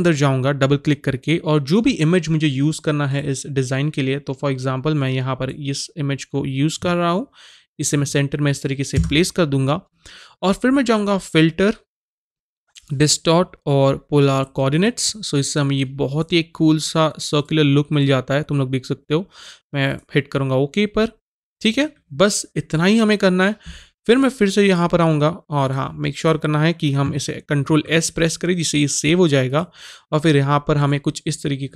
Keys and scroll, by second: 8.9 Return, 27.6 ctrl+s.